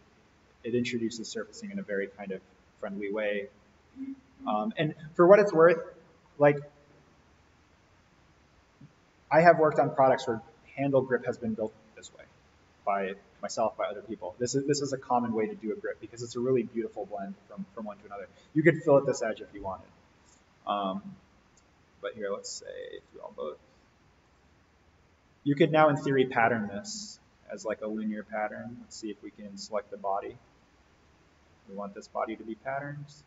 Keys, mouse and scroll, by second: 0.7 click, 5.5-6.3 middle drag, 9.0-11.1 scroll down 1, 20.1 click, 22.7 click, 29.4-30.6 scroll down 1, 30.6 click.